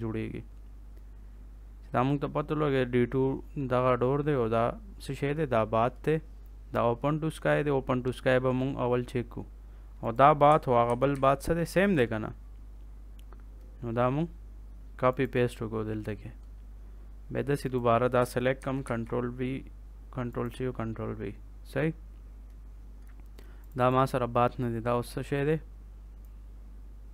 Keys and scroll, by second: 10.8 ctrl+c, 11.0 ctrl+v, 18.5 ctrl+c, 18.8 ctrl+v.